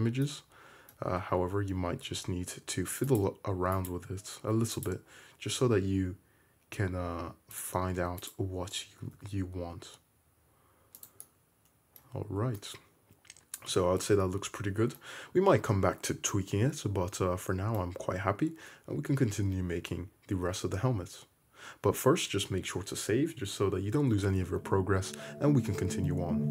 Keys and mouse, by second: 1.1 Tab, 2.3 ctrl+r, 3.3-4.0 middle drag, 4.1 middle click, 4.6 2, 5.0 click, 5.6 g, 8.2 1, 9.2 g, 12.2 Tab, 19.0 `.